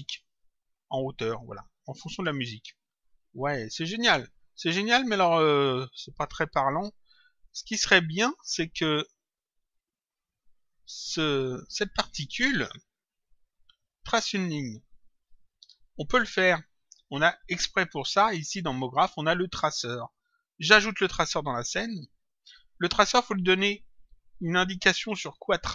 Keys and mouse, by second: 7.3 click, 17.0 click, 18.5 click, 20.4 click.